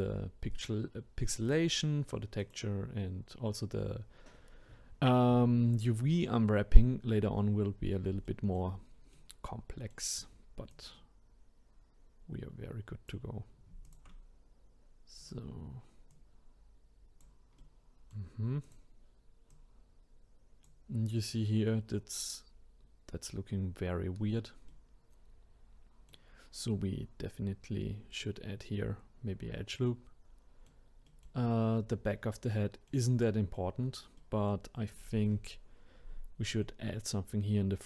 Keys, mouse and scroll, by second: 1.5-2.5 drag, 8.2-10.7 shift+middle drag, 10.7 click, 13.8 shift+click, 15.2 click, 16.1 click, 17.6-18.6 middle drag, 18.6 click, 19.5 click, 24.7-27.7 middle drag, 29.9-37.8 middle drag.